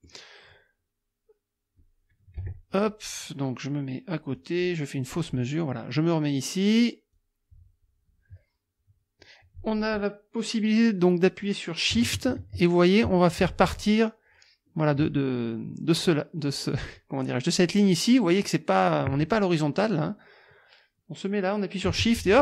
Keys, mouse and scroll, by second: 2.4 KP_Subtract, 4.4 click, 5.0 middle click, 7.1-22.4 drag.